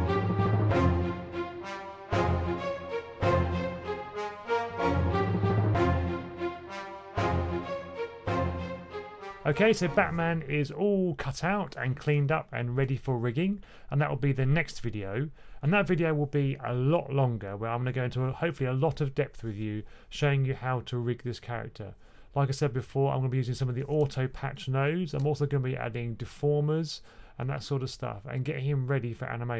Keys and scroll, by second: 0.0-0.5 typing, 0.2 super+c, 0.5 super+v, 2.2 super+c, 2.6 super+v, 2.6 x, 5.0 super+c, 5.4 super+v, 5.4 x, 8.0 super+c, 8.1 x, 8.4 super+v.